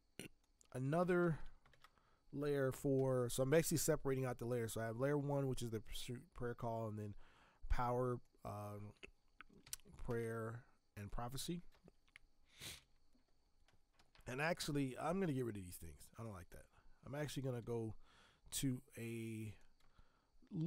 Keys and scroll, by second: 1.2 ctrl+v, 1.7 ctrl+Return, 9.6 shift+\, 11.7 space, 12.7 shift+\, 13.9 Escape, 17.6 space, 19.8 space.